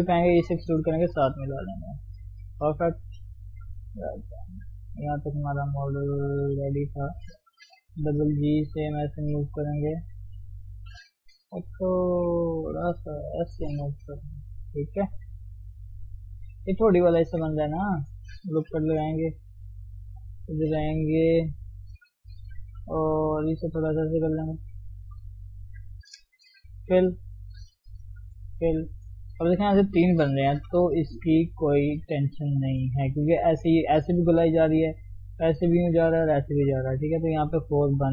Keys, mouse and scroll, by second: 0.4 e, 3.7 KP_3, 4.2-4.7 scroll up 1, 4.7 shift+z, 5.7-7.0 shift+middle drag, 7.0 click, 7.9 g, 9.2 g, 10.5 alt+shift+click, 11.4 g, 13.7 click, 14.2 g, 15.1-15.4 scroll down 1, 15.4 shift+z, 15.7 middle click, 16.5-16.9 scroll up 1, 16.9 middle click, 17.9 scroll up 1, 18.7 ctrl+r, 19.9 ctrl+KP_7, 20.2-20.6 scroll up 2, 21.4 click, 21.7 shift+middle click, 22.1-22.4 scroll up 1, 22.4 g, 24.4 click, 25.5 shift+click, 25.9 shift+click, 26.9 f, 28.1 f, 30.7 f.